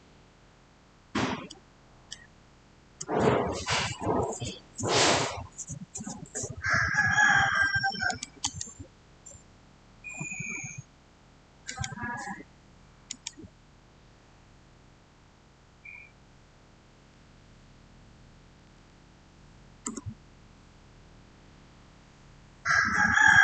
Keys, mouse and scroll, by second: 0.6 scroll down 1, 1.3-4.3 middle drag, 7.9 middle click, 7.9 click, 8.3 right click, 11.5 click, 18.2-19.1 typing, 19.7 Return.